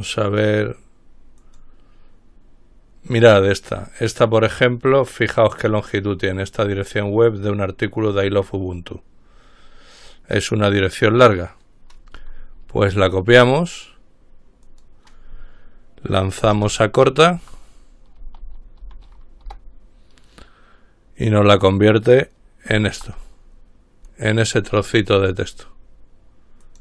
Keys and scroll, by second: 17.6-19.5 typing, 19.7 ctrl+Return, 23.1 ctrl+v.